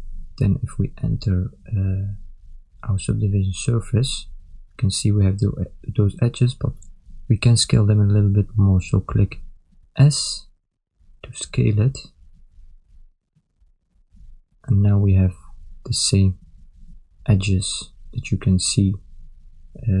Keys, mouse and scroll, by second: 1.0 Tab, 3.6 click, 4.9 ctrl+middle click, 5.9 middle click, 8.0 Tab, 8.8 ctrl+middle click, 10.1 s, 15.6 Tab, 16.3 ctrl+middle click, 16.9 middle click.